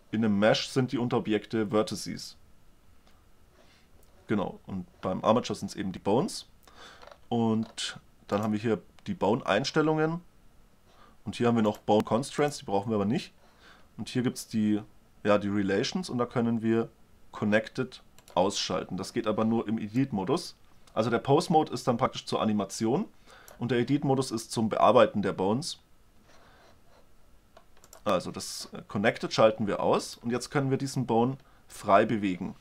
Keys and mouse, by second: 8.6-10.4 drag, 11.9-14.5 drag, 18.5-20.0 drag, 28.1-29.9 drag, 29.9 middle click, 30.3-32.6 drag.